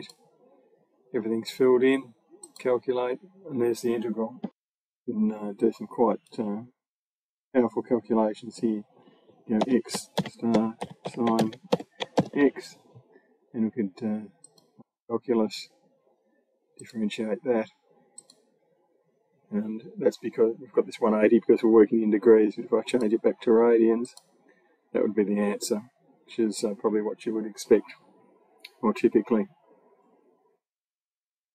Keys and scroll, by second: 9.4-12.4 typing.